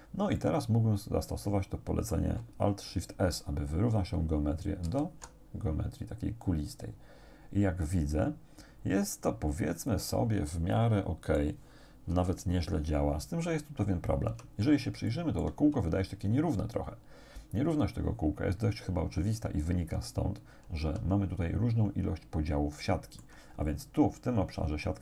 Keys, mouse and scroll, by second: 0.4-2.4 drag, 4.9 alt+shift+s, 9.8 click, 10.5-11.6 drag, 12.2 KP_7, 14.3 Tab, 15.1 shift+click, 20.8 Tab, 21.6 middle click, 21.6-22.6 scroll up 2, 22.8 shift+click.